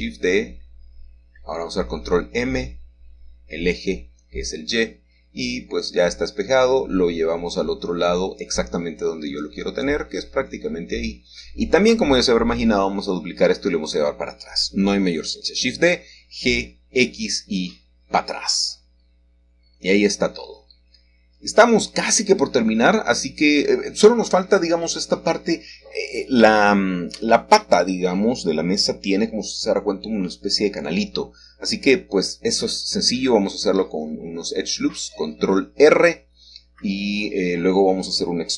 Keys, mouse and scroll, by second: 2.2 Escape, 4.2 ctrl+m, 6.3 y, 7.7 Return, 8.9 g, 10.5 y, 14.1 shift+click, 15.2 shift+click, 18.2 shift+middle click, 18.6-19.3 scroll down 1, 20.1 Escape, 22.0 g, 22.6 x, 25.0 click, 27.6 shift+middle click, 28.1 shift+middle click, 29.0 middle click, 30.1 g, 30.7 x, 33.5 shift+click, 34.0-35.0 scroll down 1, 35.0-35.5 scroll down 1, 36.2-37.7 middle drag, 37.7-38.5 scroll up 1.